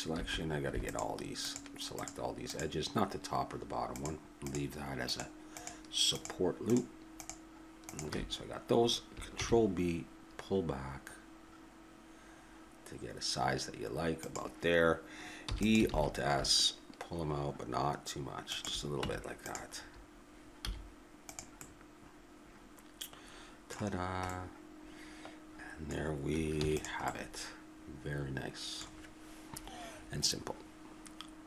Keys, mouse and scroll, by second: 0.1 a, 0.9-10.4 drag, 9.4 ctrl+b, 15.4 e, 15.9 alt+s, 19.4 Tab, 19.8-21.3 middle drag, 20.6 z, 24.0-25.0 middle drag, 25.4-26.6 middle drag, 26.6 ctrl+s.